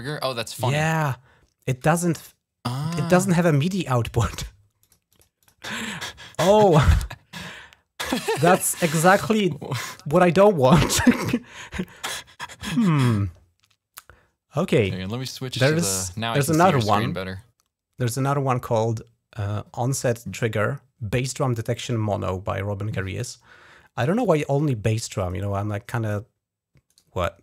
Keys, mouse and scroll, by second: 3.5 right click, 4.6 click, 4.9 click, 5.1 click, 5.3 click, 7.9 click, 8.8 click, 9.6 right click, 10.4 click, 15.8 click, 23.8 click, 23.9 click, 24.9 click, 26.7 right click, 26.8 right click.